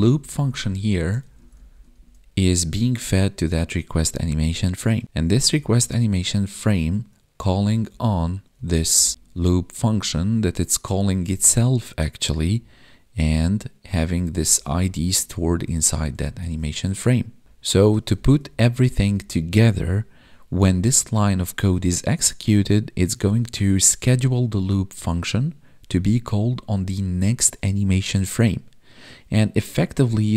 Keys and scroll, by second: 1.2 ctrl+Right, 2.4 ctrl+Left, 3.3 ctrl+shift+Left, 5.5 ctrl+Up, 7.5 Right, 7.9 Left, 9.1 ctrl+shift+Left, 12.4 Left, 16.2 ctrl+shift+Right, 17.5 Left, 18.1 ctrl+shift+Right.